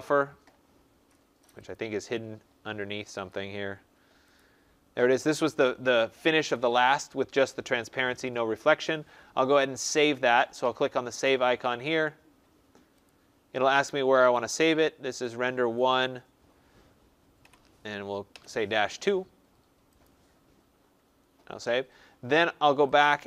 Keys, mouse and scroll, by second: 1.7 click, 3.2 click, 4.3 click, 4.4 click, 8.4 click, 10.0 click, 13.0 click, 14.2 click, 15.2 click, 15.8 click, 17.3-18.2 typing, 20.0 click, 22.9 click.